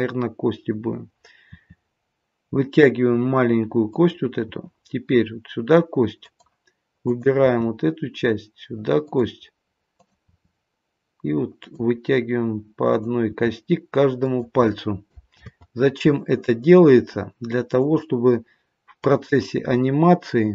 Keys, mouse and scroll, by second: 1.5 e, 4.5 e, 7.0 click, 7.4 e, 10.0 click, 12.8 click, 15.3 ctrl+z, 17.7 click.